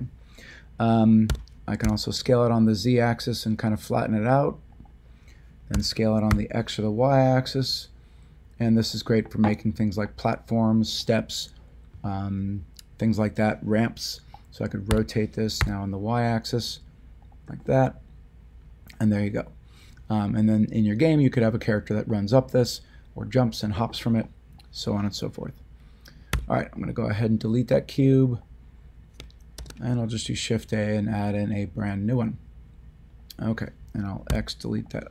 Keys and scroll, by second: 1.2 s, 1.8 z, 5.7 s, 6.3 y, 14.9 r, 15.6 y, 26.3 x, 29.5 a, 34.2 x.